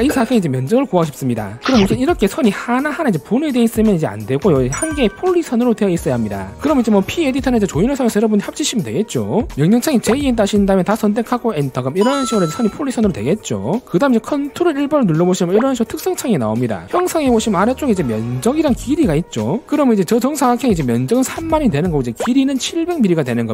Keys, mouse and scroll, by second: 2.5 click, 2.9 click, 3.2 click, 3.8 click, 10.9 right click, 11.2 click, 11.6 click, 12.0 right click, 13.2 click, 15.5 ctrl+1.